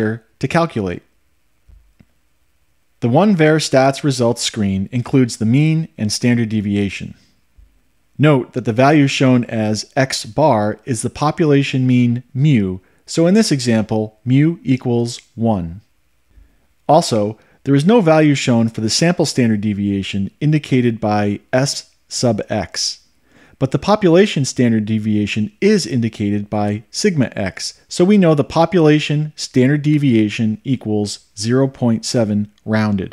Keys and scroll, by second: 1.1 Return.